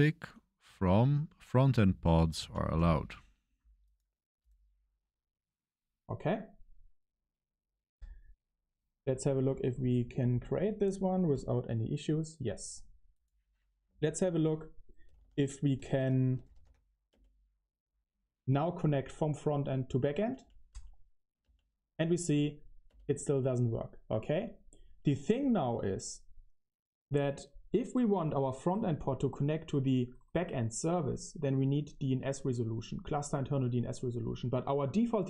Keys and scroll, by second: 0.0-0.1 typing, 1.1-3.1 typing, 4.7 shift+;, 13.8-17.0 typing, 20.2 Page_Up, 20.3 Page_Up, 20.6 Page_Up, 21.4 Page_Up, 22.8 Up, 22.8 Return.